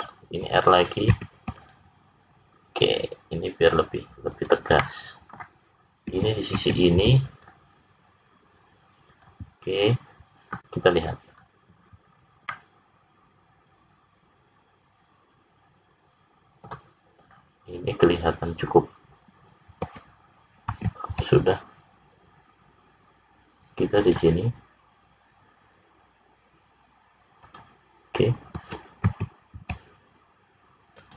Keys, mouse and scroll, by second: 1.1 ctrl+r, 4.7 middle click, 6.5 ctrl+r, 11.3 click, 12.0-13.1 scroll down 3, 12.5 middle click, 17.2-18.8 scroll up 1, 18.8-19.8 scroll up 2, 20.6 ctrl+r, 29.0 ctrl+r.